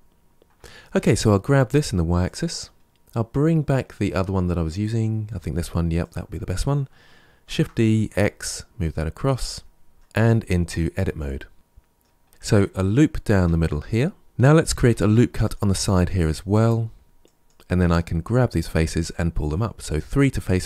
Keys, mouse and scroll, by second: 0.8 g, 2.7-4.7 scroll down 1, 4.7 click, 5.9 click, 7.3 shift+d, 9.9 KP_7, 9.9 middle click, 10.0 Tab, 10.8-12.2 middle drag, 12.2 scroll down 1, 12.3-13.3 middle drag, 13.3 ctrl+r, 14.2 ctrl+z, 14.8 ctrl+r, 19.9 3, 20.4 click.